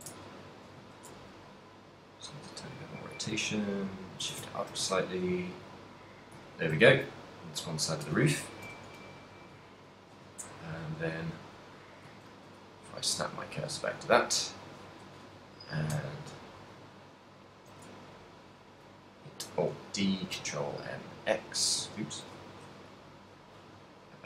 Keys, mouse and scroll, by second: 0.4 ctrl+middle click, 0.9 z, 1.2 r, 3.1 click, 3.4 g, 4.4 click, 4.6 ctrl+middle click, 4.6 z, 5.2 a, 5.5 middle click, 6.3 right click, 6.6 ctrl+middle click, 7.1 a, 7.9 right click, 7.9 middle click, 8.7 KP_1, 10.6 shift+c, 11.7 right click, 12.3 shift+s, 14.1 right click, 16.4 shift+right click, 18.3 right click, 19.6 alt+d, 20.1 right click, 20.3 ctrl+,, 21.0 x, 22.2 ctrl+m, 23.6 right click.